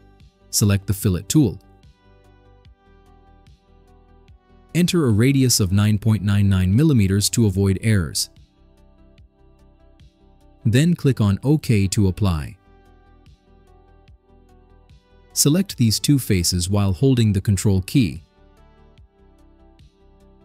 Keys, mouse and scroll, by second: 3.6 click, 5.4-7.0 typing, 7.3 click, 9.0-10.7 drag, 13.3 click, 17.1 click, 18.1-19.1 drag, 19.6 ctrl+click.